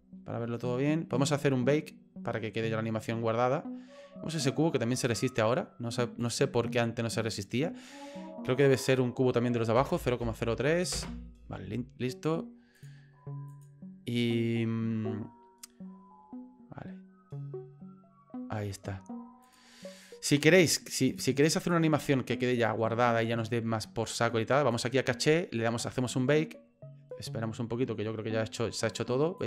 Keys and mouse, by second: 6.2 click, 7.3 right click, 8.8-11.5 drag, 12.7 click, 13.6-17.3 drag, 19.4 click, 21.1 click, 21.6 click, 24.7 click, 25.9 click.